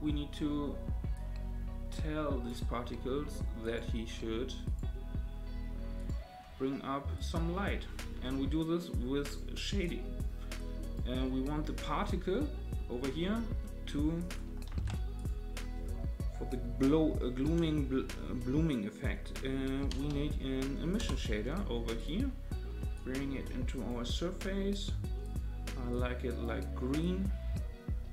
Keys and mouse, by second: 1.1-2.5 drag, 3.7-4.5 drag, 7.2-9.3 drag, 9.8 click, 10.6 click, 13.6 middle click, 14.2 click, 14.7 shift+a, 22.9-23.9 drag, 25.2 click, 27.0-28.1 drag.